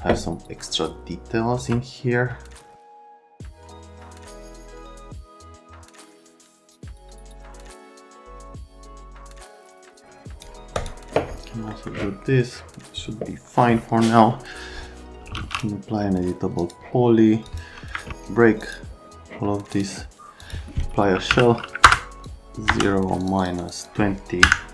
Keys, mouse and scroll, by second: 1.6 F3, 3.7 click, 4.3 click, 4.6 click, 4.9 click, 5.3 click, 5.5 click, 6.0 click, 6.2 click, 6.8 click, 7.1 click, 7.3 scroll down 1, 7.9 scroll up 2, 8.7-10.0 typing, 9.9 click, 10.8 click, 11.7 right click, 15.0-16.0 typing, 16.6 click, 17.5 click, 18.6 click, 19.7 click, 20.4 click, 20.9-22.7 typing, 21.8 Return, 22.2 click, 23.2 click, 23.4 click, 23.6 middle click, 23.7 middle click, 24.4 KP_Subtract.